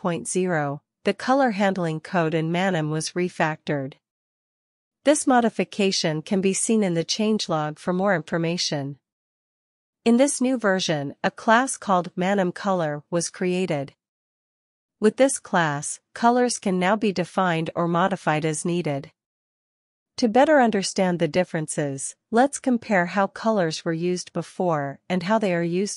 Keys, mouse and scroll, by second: 1.8-7.6 scroll down 1, 7.6-12.3 scroll down 1, 13.5 click, 15.8-25.4 scroll up 1, 25.4 ctrl+l.